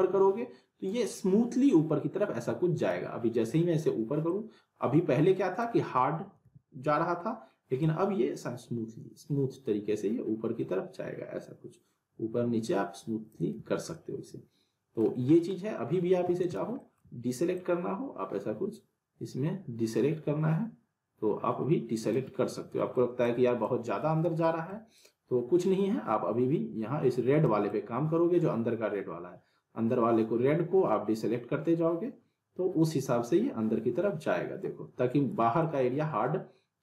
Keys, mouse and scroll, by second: 2.9 ctrl+z, 4.2-5.8 drag, 6.4 ctrl+z, 7.8-13.4 drag, 13.6 ctrl+z, 13.9 middle click, 13.9-15.1 middle drag, 16.2 w, 16.4 right click, 16.8 middle click, 17.5-22.2 drag, 22.7 middle click, 23.2-23.9 alt+click, 24.4 middle click, 25.0-27.4 drag, 35.6-36.8 alt+drag.